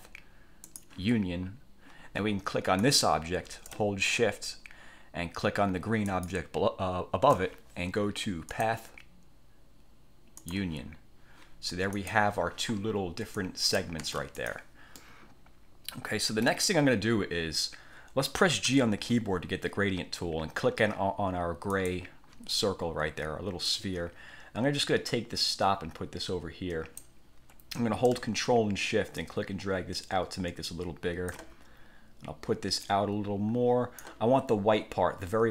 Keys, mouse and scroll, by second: 0.8 click, 2.9 click, 6.2 shift+click, 8.7 click, 10.5 click, 12.1 click, 13.5 click, 14.1 ctrl+z, 14.5 ctrl+click, 15.1-16.5 middle drag, 16.5 click, 18.8 g, 21.9 click, 23.8-27.3 drag, 29.3-31.6 ctrl+shift+drag, 32.9 click.